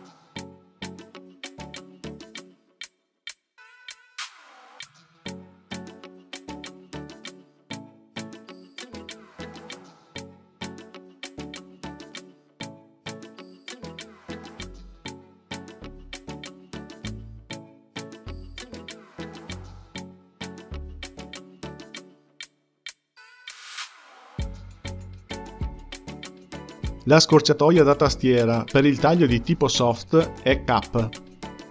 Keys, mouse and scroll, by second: 1.0 x, 2.6 click, 3.0-9.7 drag, 11.7 click, 12.6-14.6 drag, 14.9-23.3 drag, 25.3-28.2 drag, 30.6 k.